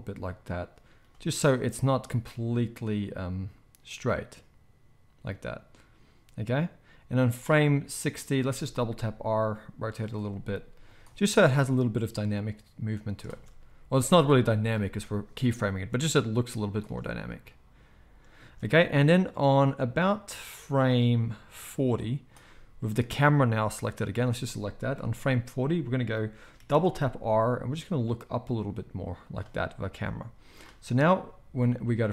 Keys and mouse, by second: 1.8-3.1 drag, 3.1-10.1 middle drag, 8.4 r, 10.1-19.8 right drag, 10.3 r, 11.7-19.8 drag, 11.7-24.3 middle drag, 13.3 space, 14.8 space, 16.8 space, 18.4 space, 24.3-28.6 right drag, 24.9 KP_0, 26.6 r, 28.6-30.2 shift+middle drag, 30.2-32.1 drag.